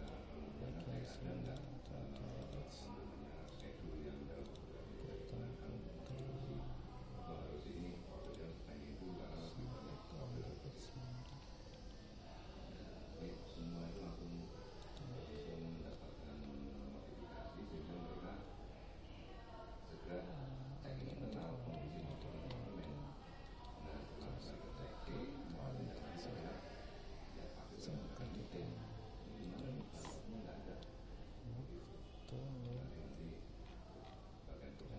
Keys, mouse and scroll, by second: 0.0-3.3 drag, 3.5-6.1 right drag, 6.1 middle click, 6.5 click, 11.7-13.9 middle drag, 12.3 Tab, 13.9 Tab, 16.8 Tab, 21.0 click, 22.1 click, 23.5-25.2 right drag, 24.5 Tab, 28.3-29.4 drag, 29.4 right click, 30.1 click, 31.3 g.